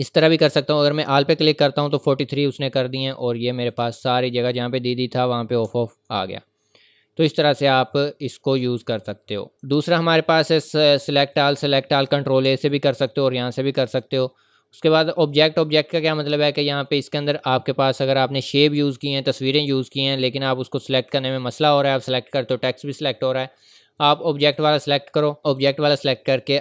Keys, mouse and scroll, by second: 0.7 click, 4.3 scroll up 1, 4.8 scroll down 1, 5.7-6.1 scroll up 1, 9.5 click, 13.0 click, 13.9 click, 20.5 click, 24.0 click.